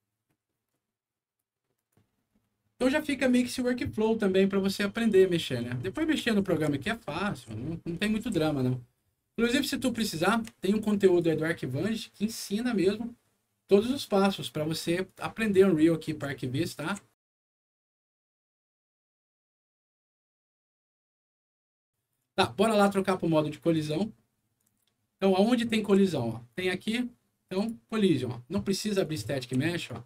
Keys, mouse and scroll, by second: 1.7 click, 4.9-8.9 right drag, 5.7-7.9 typing, 9.4-11.2 right drag, 9.5-10.8 typing, 15.0-22.1 right drag, 16.1 d, 16.8 w, 17.6 d, 18.9 e, 19.5 q, 23.7 click, 24.5-26.1 right drag, 24.8 a, 26.5 click, 27.5 click, 29.0 right click, 29.3 a.